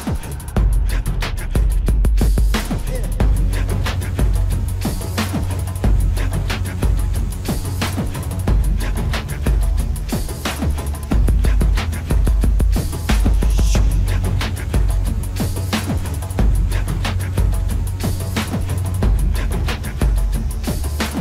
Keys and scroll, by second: 18.3 ctrl+-.